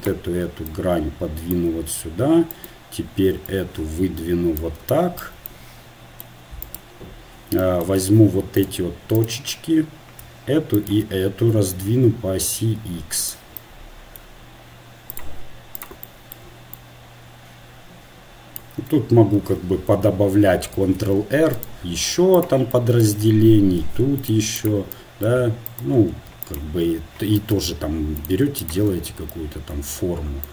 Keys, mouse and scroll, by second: 2.5-3.9 drag, 4.5-6.6 drag, 6.6-8.6 right drag, 8.6 ctrl+Tab, 9.1-13.0 right drag, 11.8 s, 15.1-18.6 right drag, 17.3 click, 22.4 ctrl+e, 22.4 ctrl+r, 24.8 ctrl+r, 28.3 ctrl+Tab.